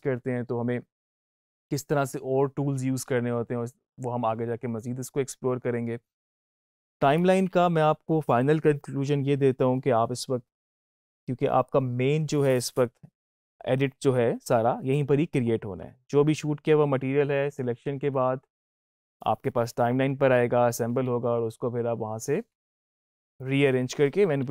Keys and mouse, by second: 10.7-24.5 drag.